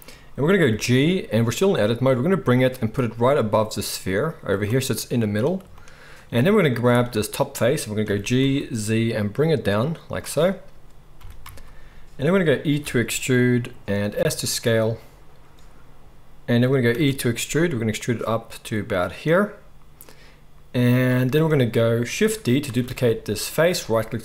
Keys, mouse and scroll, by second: 0.7 g, 2.8-24.2 middle drag, 8.0 g, 12.8 e, 16.9 e, 22.6 shift+d.